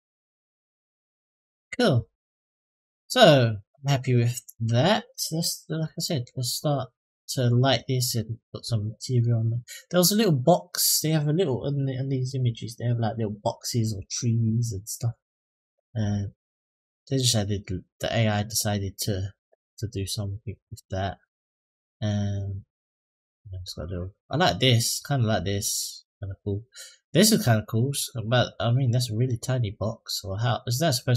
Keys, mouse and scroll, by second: 0.0-1.4 middle drag, 1.7-2.2 scroll down 3, 2.2-4.9 middle drag, 5.2-5.6 shift+middle drag, 5.8 middle click, 7.9-8.3 shift+middle drag, 8.7 middle click.